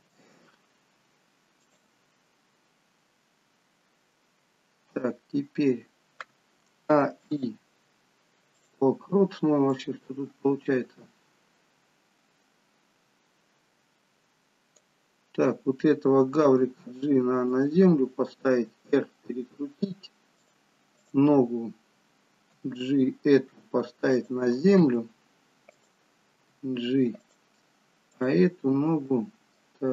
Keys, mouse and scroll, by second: 29.4 click.